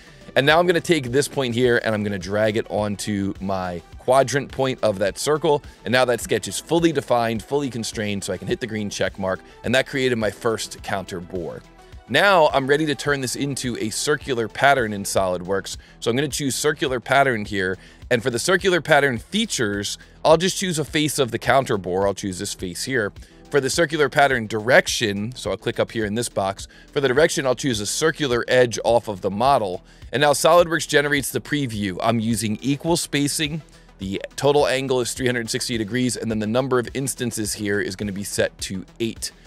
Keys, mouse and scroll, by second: 0.5-3.7 drag, 5.6 click, 8.5 click, 9.1 click, 13.4 click, 17.5 click, 19.2 click, 22.0 click, 29.1 click, 32.5 click, 33.8 click, 35.5 click, 36.1 click, 36.3 click, 36.6 click, 37.5 click, 37.9 click, 38.3 click.